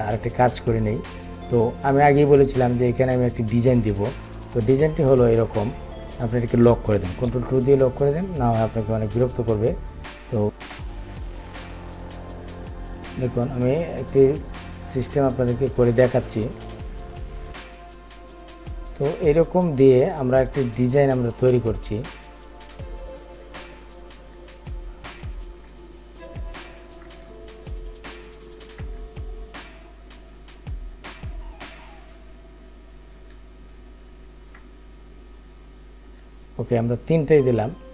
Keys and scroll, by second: 7.5 ctrl+2.